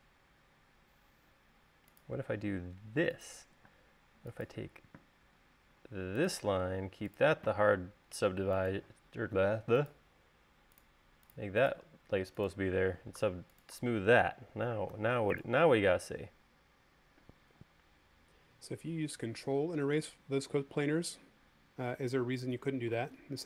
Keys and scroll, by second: 1.4 l, 4.0 space, 5.7 l, 8.1 space, 15.3-15.9 typing.